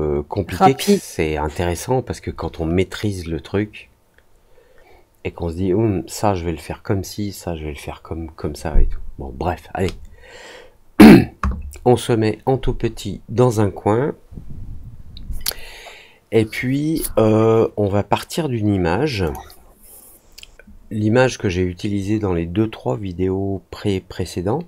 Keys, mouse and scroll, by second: 19.2 click.